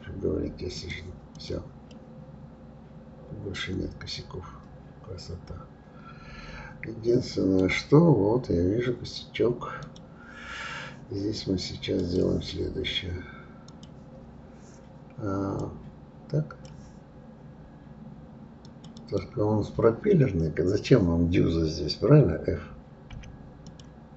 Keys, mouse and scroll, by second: 0.7 click, 1.4 click, 1.9-4.9 middle drag, 8.1-8.5 scroll up 3, 9.8 click, 12.0 click, 13.7 click, 15.6-18.6 drag, 18.9 click, 20.0-23.1 scroll down 3, 23.6 click.